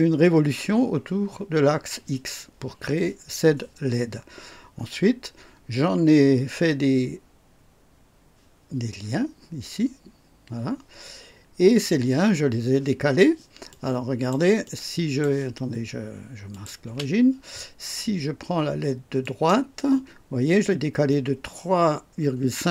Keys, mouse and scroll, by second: 13.7 click, 14.6 click, 16.5 click, 16.8 space, 19.2 click.